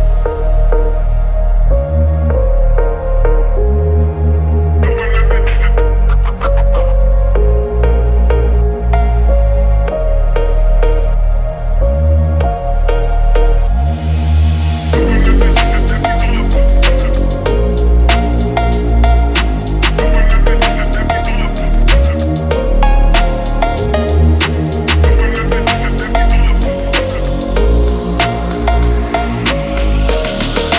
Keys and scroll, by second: 0.1 ctrl+z, 3.1 ctrl+=, 3.6 ctrl+=, 4.3 ctrl+=, 5.0 space, 6.5 ctrl+-, 7.5 ctrl+-.